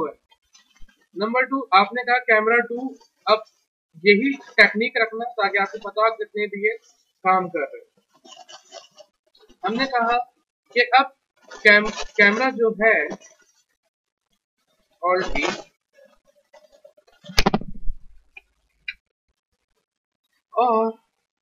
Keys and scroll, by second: 13.6 F3, 15.1 alt+b.